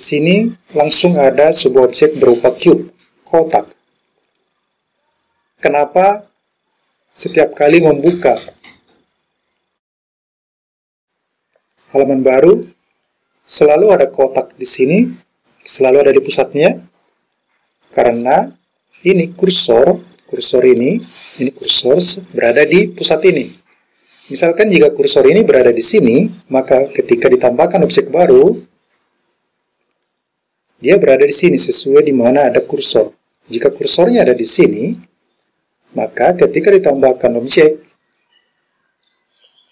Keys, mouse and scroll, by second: 4.4 click, 8.5-13.1 drag, 20.8 click, 25.7 click, 27.7-30.1 drag, 34.0 click, 36.8-39.6 drag.